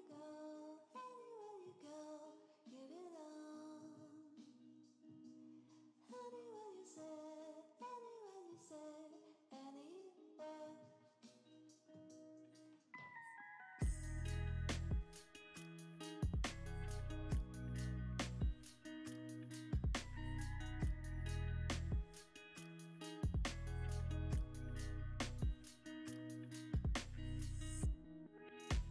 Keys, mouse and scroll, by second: 0.1 x, 1.5 y, 3.6 middle click, 6.7 click, 7.5-7.8 scroll up 1, 8.3 g, 8.4 z, 10.1 middle click, 10.9-12.0 scroll up 1, 12.0 g, 12.1 z, 13.3 g, 13.4 z, 14.6 g, 14.7 z, 16.1 z, 17.7 g, 17.9 z, 19.8 g, 19.9 z, 23.2 scroll up 1, 23.7 middle click, 26.2 g, 26.3 z.